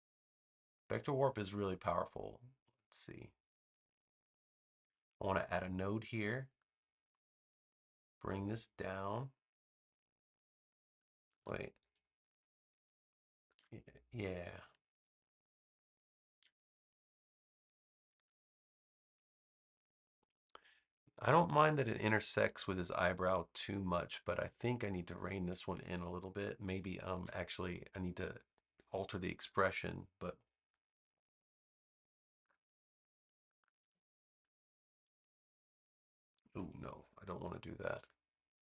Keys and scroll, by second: 27.1 v, 33.7 a, 36.8 super+z.